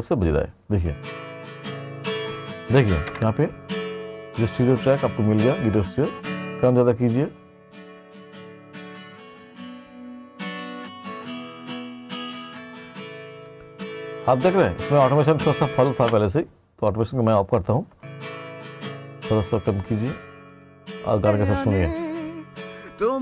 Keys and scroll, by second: 0.8 space, 16.0 space, 18.1 space.